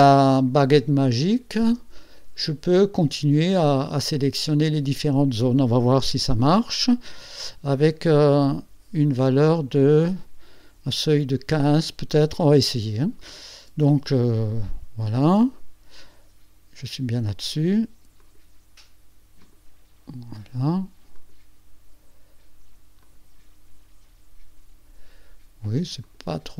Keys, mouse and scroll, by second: 1.0-1.5 ctrl+scroll down 2, 2.0 ctrl+click, 2.1 ctrl+scroll down 2, 6.1 u, 14.4 click, 18.2 shift+click, 19.4 shift+click, 21.1 shift+click, 23.0 shift+click, 26.0 shift+click.